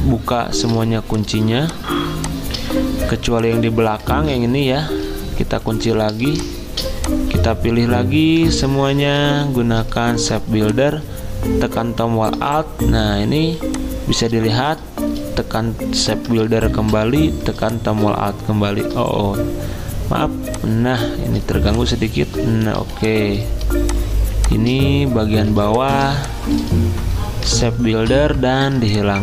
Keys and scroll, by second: 0.3 ctrl+alt+2, 4.1 ctrl+z, 5.6 ctrl+2, 6.2 m, 13.4 z, 16.7 m, 22.8 z, 25.5 z, 27.9 m.